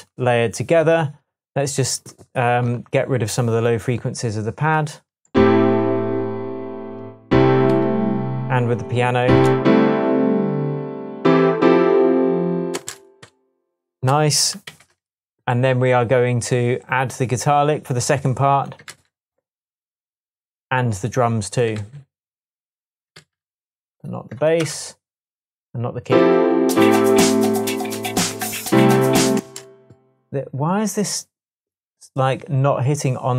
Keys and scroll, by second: 5.2 space, 7.7 super+c, 9.4 super+v, 12.7 space, 13.4 space, 14.6 d, 18.9 super+c, 21.7 super+c, 23.1 super+v, 24.6 BackSpace, 29.3 space.